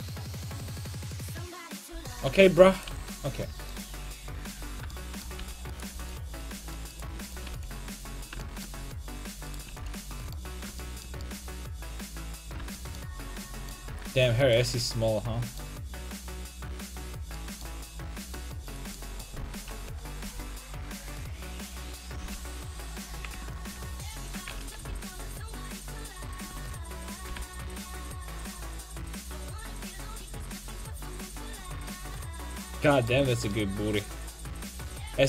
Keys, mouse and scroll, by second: 1.9 l, 2.4 g, 2.9 x, 3.5 Tab, 3.7-5.9 right drag, 4.4 Tab, 5.4 g, 5.9 x, 6.9 right click, 7.5 x, 9.7 x, 14.0 Tab, 14.4-17.6 right drag, 14.6 Tab, 19.9 KP_5, 20.1 KP_1, 20.3 KP_3, 22.2 g, 24.1 alt+o, 24.8 g, 27.3 g, 31.5-33.1 drag, 32.1 middle click, 33.1 Tab.